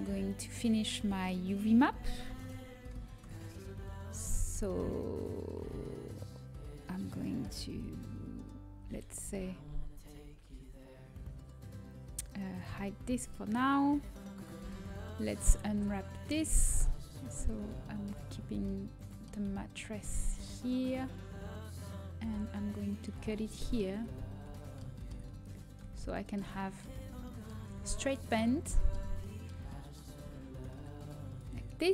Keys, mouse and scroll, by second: 3.7 ctrl+p, 3.7 ctrl+z, 3.7 middle click, 6.5-10.3 middle drag, 10.3 a, 10.3 l, 10.6 l, 12.6 h, 16.0 l, 16.8-18.6 drag, 18.6 middle click, 22.8 right click, 25.7-29.2 middle drag, 29.2-30.4 drag, 30.4-31.9 right drag, 31.6-31.9 drag.